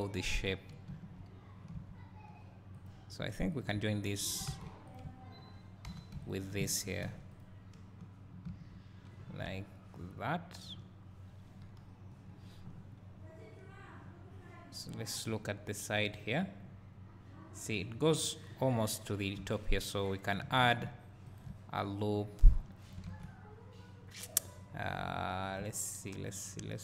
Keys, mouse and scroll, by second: 1.2-2.9 drag, 4.0 shift+click, 4.5 alt+a, 5.9 w, 6.3 shift+click, 9.2 scroll down 2, 9.4 `, 16.4 click, 18.3-19.4 scroll up 1, 19.4 `, 23.1 alt+a, 25.7 `.